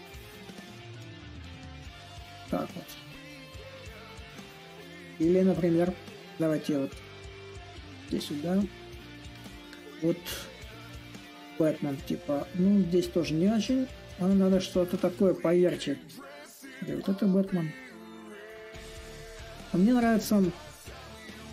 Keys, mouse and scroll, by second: 0.2-5.0 drag, 5.2-10.3 drag, 10.3-15.4 drag, 16.5-21.5 drag.